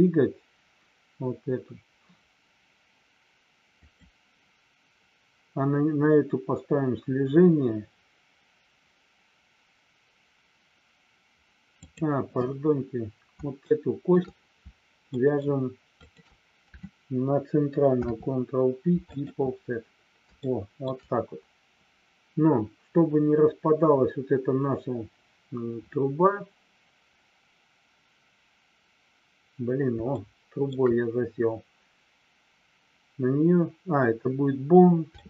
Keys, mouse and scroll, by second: 3.7 click, 11.8 click, 13.6 shift+middle click, 15.2 shift+middle click, 16.0 shift+click, 18.0 ctrl+p, 20.4 shift+middle click, 30.1 shift+middle click, 35.1 shift+middle click.